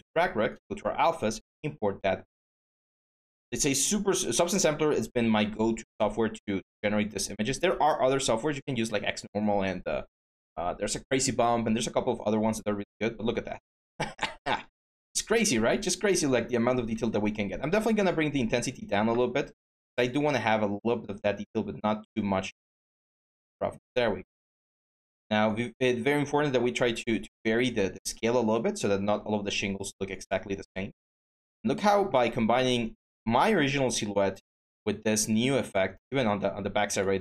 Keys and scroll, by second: 0.0-0.2 typing, 16.6 ctrl+z, 20.0 ctrl+z.